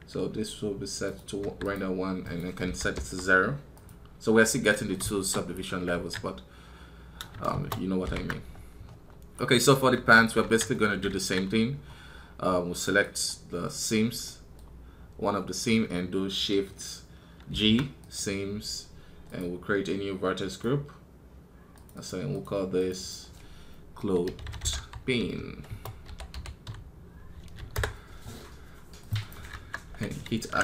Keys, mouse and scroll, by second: 9.2 right click, 12.6 right click, 13.5-30.6 middle drag.